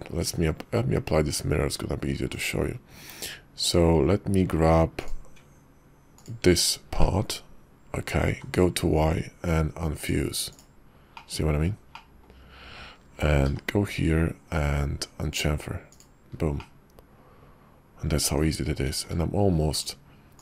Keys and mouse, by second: 0.2 q, 3.0 Tab, 4.9 click, 6.2 ctrl+click, 7.0 click, 8.3 y, 11.3 middle click, 13.5 y, 16.7-18.2 drag, 18.2 Tab, 18.9 alt+x, 19.7-20.4 shift+drag.